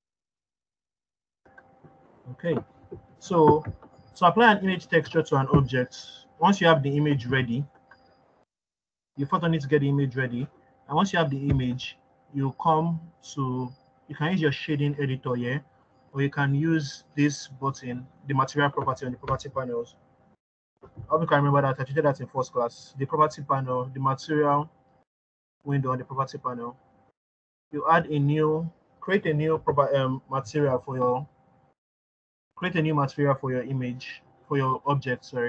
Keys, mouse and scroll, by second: 5.5-9.2 scroll down 2, 11.4-16.5 drag, 21.2 click, 27.9 click.